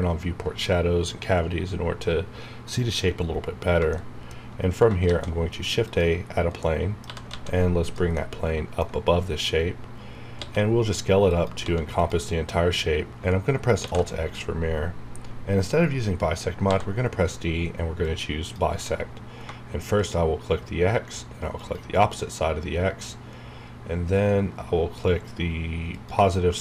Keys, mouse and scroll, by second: 3.3 e, 3.3-3.7 scroll down 1, 4.6 shift+middle click, 4.7 scroll up 1, 5.0 shift+a, 5.8 click, 5.9 click, 6.6 middle click, 6.8-7.8 typing, 7.8 click, 8.1 middle click, 9.4-10.3 scroll down 1, 10.4 s, 11.3 click, 11.6 s, 12.0 click, 13.8 alt+x, 16.7 d, 18.0-20.0 drag, 25.9 shift+click.